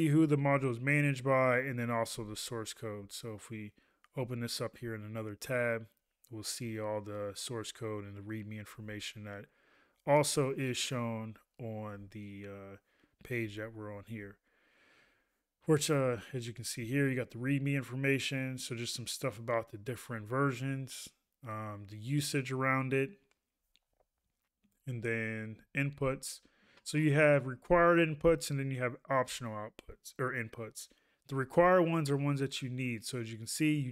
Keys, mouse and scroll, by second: 0.5 ctrl+a, 13.5 ctrl+a.